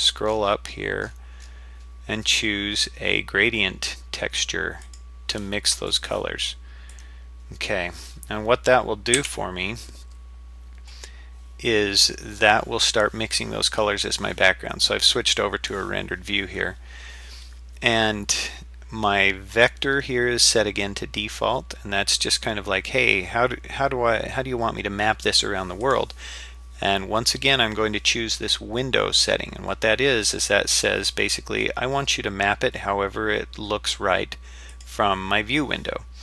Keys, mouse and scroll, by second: 6.9 click, 9.2 z, 25.8-34.9 drag.